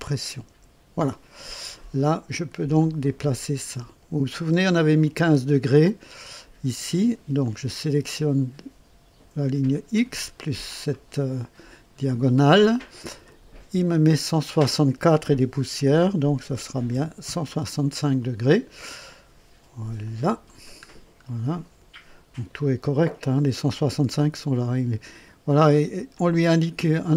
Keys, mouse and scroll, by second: 0.4 Delete, 2.7-5.2 drag, 5.7-6.7 scroll up 2, 7.4 click, 9.9 click, 13.2 click, 15.9 KP_1, 16.5 KP_6, 16.9 KP_5, 17.2 KP_Enter, 20.0 click, 20.8 scroll down 1, 22.6 click, 26.1-26.9 drag.